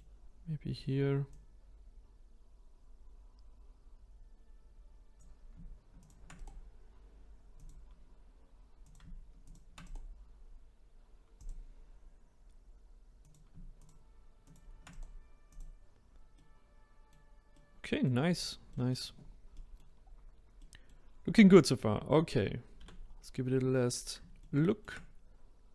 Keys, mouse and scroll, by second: 1.2 click, 6.0 shift+click, 6.3-8.8 right drag, 8.8 click, 9.4 shift+click, 9.8-12.8 right drag, 13.2 click, 13.7 shift+click, 14.4 shift+click, 14.9 right click, 16.3-18.3 middle drag, 18.3 click, 18.7 middle click, 19.1 scroll down 1, 19.5 middle click, 20.0-20.6 scroll up 1, 20.6 middle click, 21.2 scroll down 1, 21.5 middle click, 22.1-22.7 scroll down 1, 22.7 a, 23.0-24.4 scroll down 1, 24.4-25.7 shift+middle drag.